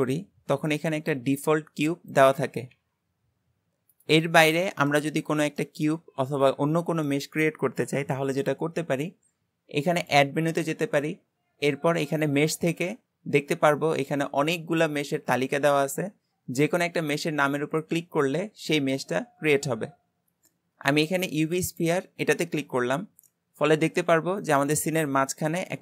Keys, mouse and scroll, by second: 0.2-0.8 scroll down 3, 0.8-2.1 middle drag, 2.1 click, 2.8 g, 4.5-5.1 middle drag, 5.1 scroll up 3, 5.6-8.6 middle drag, 10.0-13.1 drag, 22.8-23.3 scroll up 2, 23.3-25.8 middle drag.